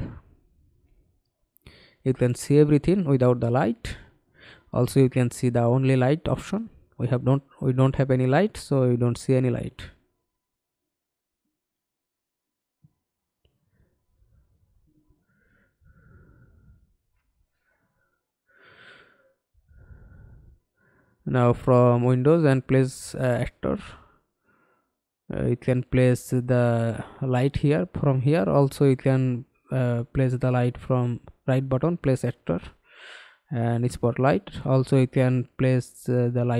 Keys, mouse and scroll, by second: 8.9 middle click, 9.7-10.6 scroll up 5, 10.6-11.0 alt+scroll down 1, 11.0 alt+click, 11.8 scroll up 1, 12.2 middle click, 27.3 right click, 32.9 Delete.